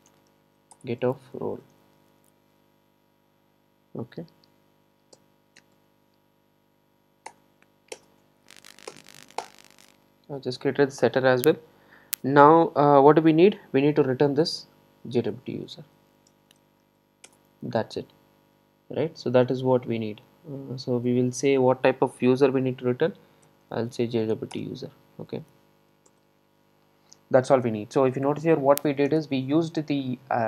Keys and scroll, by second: 0.8 Return, 7.3 alt+Return, 9.4 alt+Return, 17.3 Return, 24.6 Return.